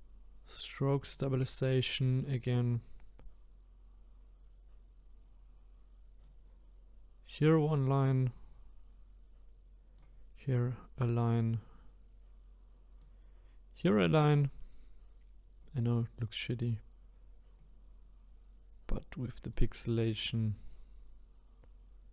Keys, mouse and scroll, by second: 3.2-6.2 drag, 7.5-10.6 drag, 11.0-14.0 drag, 15.6 click, 17.6-22.1 drag.